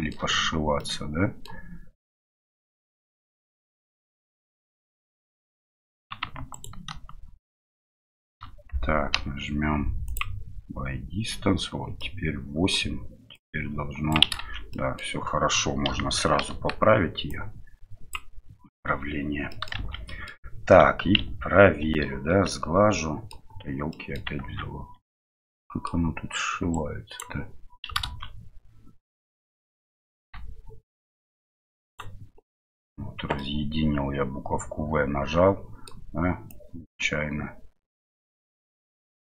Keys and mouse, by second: 0.8 middle click, 2.0 middle click, 3.7-6.0 middle drag, 6.5 alt+right click, 7.7 alt+shift+right click, 9.1 m, 12.0 middle click, 13.3 click, 14.4 ctrl+z, 14.7 middle click, 15.8 KP_1, 16.5 KP_3, 17.3 click, 19.6 middle click, 19.8 shift+z, 20.8 Tab, 22.5-23.3 middle drag, 23.9 middle click, 24.6 Tab, 25.1 middle click, 26.7 right click, 28.3 ctrl+z, 30.4 v, 33.4-35.9 middle drag, 36.7-38.3 drag, 38.3 middle click.